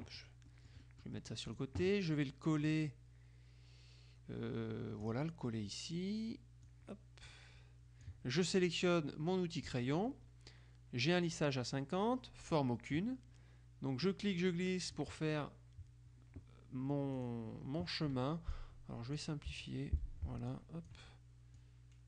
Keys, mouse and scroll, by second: 0.6-2.2 middle drag, 1.6 click, 2.8 click, 5.1 click, 6.8-8.6 drag, 9.8 click, 14.1 click, 17.2 click, 18.6-19.8 drag, 19.6 Delete, 20.6-21.5 drag, 21.7-22.0 drag.